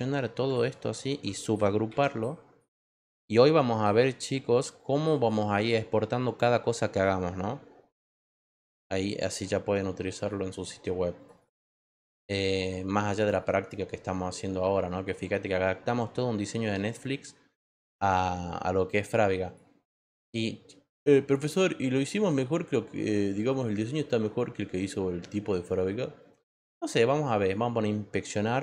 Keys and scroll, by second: 1.9 ctrl+g.